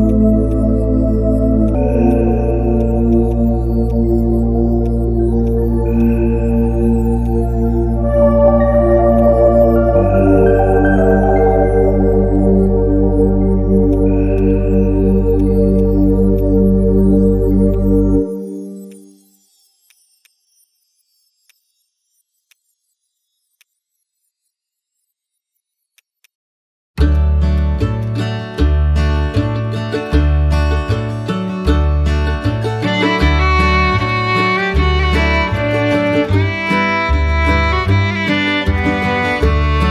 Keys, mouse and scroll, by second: 3.1 right click, 8.3 x, 27.1 ctrl+click, 27.6 ctrl+click, 30.6 ctrl+right click, 31.3 shift+click, 34.1 shift+click.